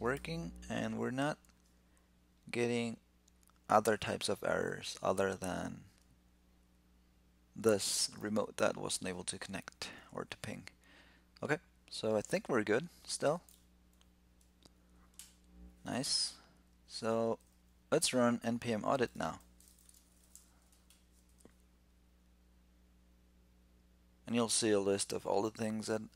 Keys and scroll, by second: 0.0 alt+super+i, 13.3 super+q, 19.2 ctrl+l.